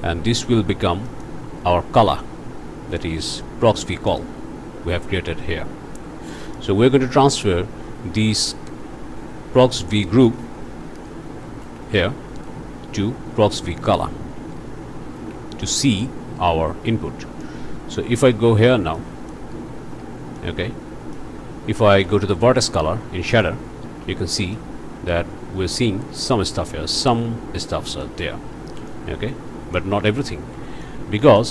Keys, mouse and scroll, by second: 1.1 click, 4.1 click, 6.4 click, 10.7 ctrl+c, 11.6 ctrl+v, 14.4 ctrl+c, 15.1 ctrl+v, 15.7 ctrl+click, 17.4-18.5 drag, 19.0 click, 19.7-20.3 scroll up 4, 20.4-21.4 middle drag, 22.2-23.6 ctrl+shift+middle drag, 24.6-26.7 drag, 28.0 click, 28.9-30.0 drag, 30.0 ctrl+z, 30.4 ctrl+scroll down 2, 30.8 click.